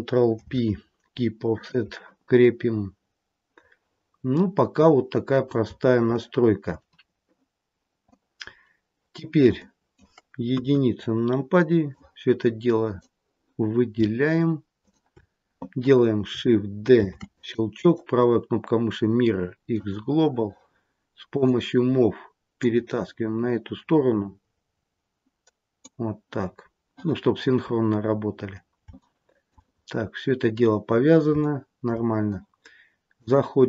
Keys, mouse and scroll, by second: 0.4 ctrl+p, 2.3 middle click, 6.1 shift+middle click, 8.0 middle click, 9.5 middle click, 10.4 KP_1, 11.0-11.9 scroll down 4, 11.9 click, 14.7 shift+click, 16.9 shift+d, 17.8 right click, 21.2 click, 22.5 click, 28.2-28.9 scroll up 4, 28.9 shift+middle click, 29.7-30.5 scroll up 1, 30.5-31.2 scroll down 5, 31.2 scroll down 3, 31.3 shift+middle click, 33.1 click.